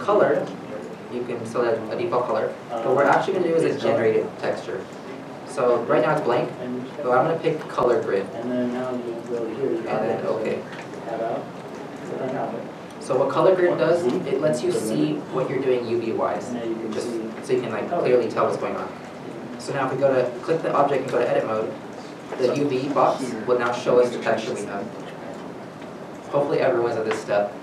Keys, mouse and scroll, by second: 12.5 middle click, 13.0 scroll up 1, 18.4 scroll up 1, 18.6 shift+middle click, 19.4 scroll down 1, 21.1 Tab, 22.1 scroll, 25.1 a, 26.1 alt+a.